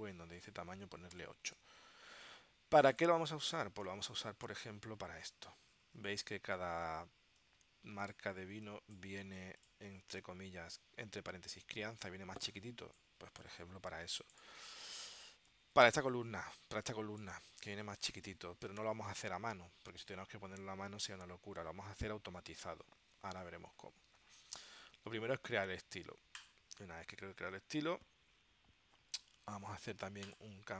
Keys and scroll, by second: 1.2 8, 1.6 Tab, 3.7 super+Tab.